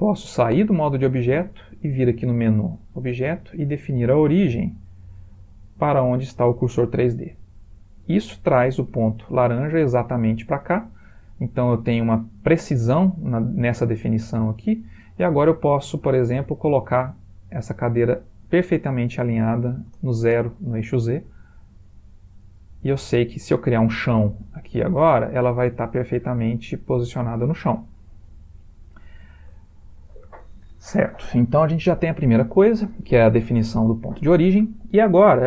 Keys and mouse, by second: 0.6 Tab, 3.5 click, 7.3 middle click, 8.0 middle click, 9.5 middle click, 10.6 middle click, 11.2 ctrl+middle click, 11.8 middle click, 12.5 middle click, 18.4 click, 21.1 middle click, 21.3 middle click, 25.5 middle click, 26.8 middle click, 27.4 ctrl+middle click, 27.9 shift+middle click, 28.3 ctrl+middle click, 28.6 middle click, 29.6 shift+middle click.